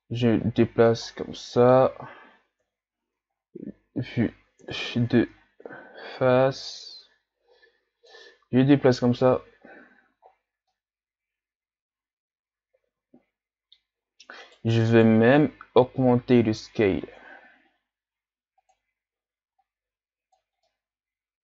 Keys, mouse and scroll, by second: 1.1-2.6 middle drag, 2.6 KP_1, 3.4 ctrl+scroll up 6, 4.6 KP_7, 5.4-6.1 scroll up 6, 6.5-9.4 drag, 10.1 a, 10.3-10.7 scroll down 1, 10.7-13.7 middle drag, 13.9-14.4 scroll up 3, 14.4 right click, 14.9 shift+right click, 15.7 s, 19.6-20.7 drag, 20.7-21.4 middle drag.